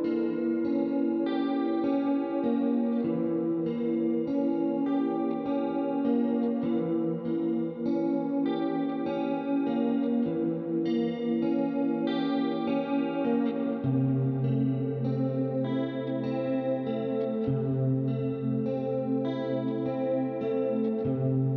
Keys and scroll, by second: 0.0-0.5 typing, 13.4-14.2 typing.